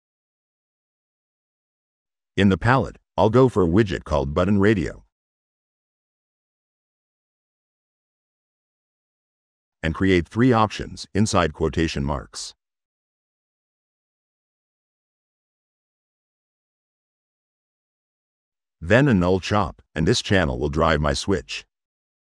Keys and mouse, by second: 0.2-0.5 drag, 0.7 click, 2.8 click, 5.9 click, 7.0 click, 8.6 click, 9.4 click, 9.9 click, 15.4-17.0 drag, 17.1-18.7 drag, 19.8 drag, 21.8 click.